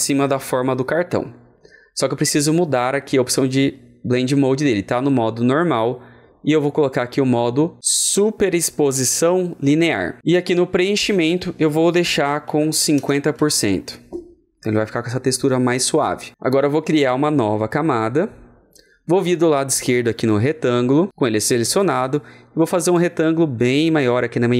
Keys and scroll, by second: 12.2 alt+Return, 12.4 ctrl+a, 12.6 KP_5.